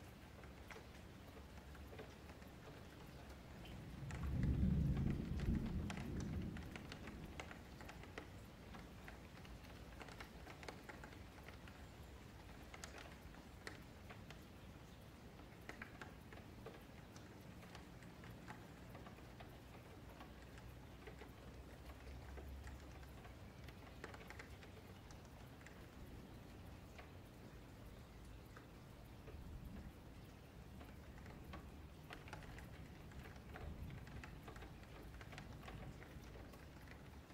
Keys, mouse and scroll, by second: 0.0-2.3 middle drag, 2.3 i, 5.2 click, 9.4 alt+s, 22.2-23.9 middle drag, 23.9 scroll down 1, 24.2 Tab, 24.4-26.0 middle drag, 26.0 ctrl+z, 26.1 ctrl+z, 26.4 ctrl+z, 26.7 middle click, 27.3 ctrl+z, 27.8 ctrl+z, 28.6 ctrl+shift+z, 28.9-29.9 middle drag, 29.9 ctrl+KP_Add, 30.7 scroll up 3, 30.9-32.4 right drag, 32.4-33.1 scroll down 1, 33.1 Tab, 33.5 ctrl+a, 34.8-35.8 right drag, 35.8 middle click, 36.2 Tab, 36.3 scroll up 2, 36.6 Tab.